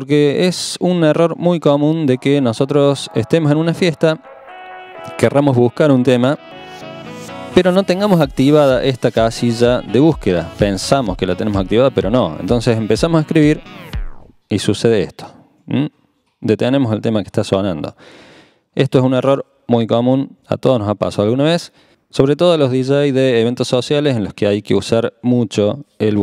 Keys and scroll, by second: 13.5-14.3 typing.